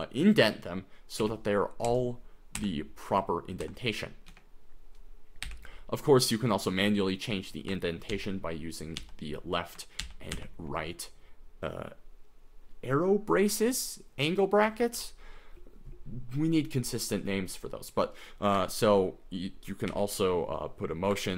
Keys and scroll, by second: 1.4 i, 1.9 Right, 2.8 Left, 3.1 Right, 3.6 Left, 4.3 Escape, 5.5 u, 8.1 shift+., 9.0 shift+., 10.0 shift+,, 10.3 shift+,, 14.6 j, 15.0 k, 19.9 5.